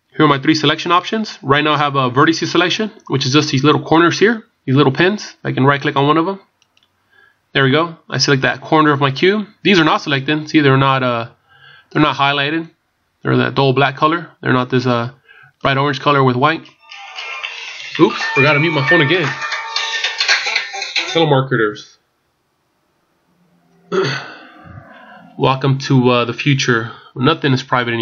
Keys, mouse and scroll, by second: 1.3 scroll up 3, 6.6 right click, 7.4 scroll up 1, 10.1 scroll up 3, 12.2 middle click, 15.9-16.4 scroll up 2, 16.4 scroll down 1, 19.5 scroll down 3.